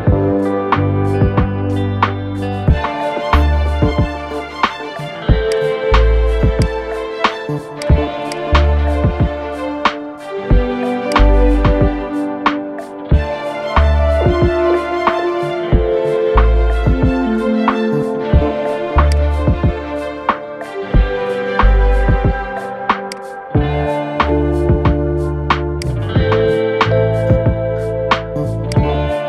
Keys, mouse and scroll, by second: 0.2 scroll up 3, 0.7 scroll down 5, 1.1-4.0 middle drag, 4.0-4.7 scroll up 1, 4.7-5.2 shift+middle drag, 5.2 drag, 6.3-8.2 drag, 10.0 middle click, 10.3 scroll up 1, 10.8 click, 12.7 scroll up 1, 13.2-14.7 middle drag, 14.7 scroll up 1, 16.0 ctrl+z, 17.0 ctrl+z, 18.9 click, 22.8-26.8 drag, 26.8-27.4 scroll down 2, 27.4-28.6 scroll up 2, 28.6 click.